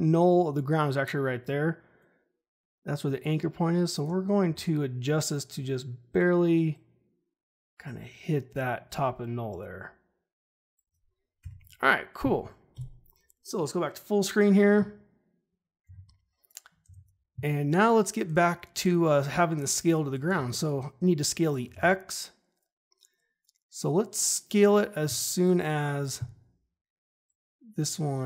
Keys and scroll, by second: 4.4 ctrl+z, 11.4 Escape, 12.7 /, 21.7 ctrl+z.